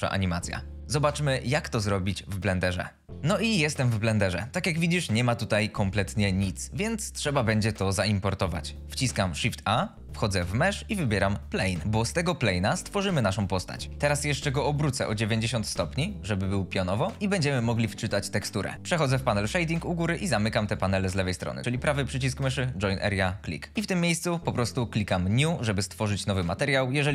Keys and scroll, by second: 9.7 shift+a, 13.8 Escape, 13.9 r, 14.3 x, 14.4 KP_9, 14.8 KP_0, 15.0 Return.